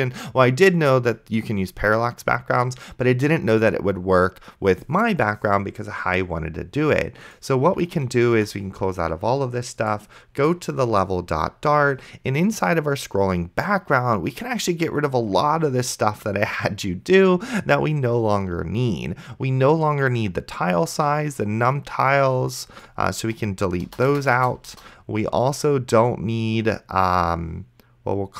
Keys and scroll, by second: 8.2 ctrl+w, 24.2 BackSpace.